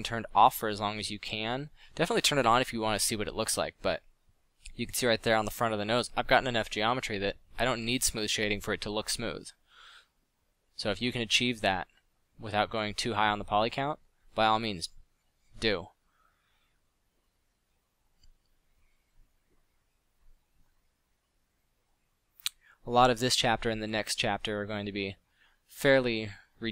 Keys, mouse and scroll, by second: 1.4 click, 4.6 f, 6.9 drag, 8.6 f, 10.4 f, 11.4 click, 16.1 f, 18.8 f.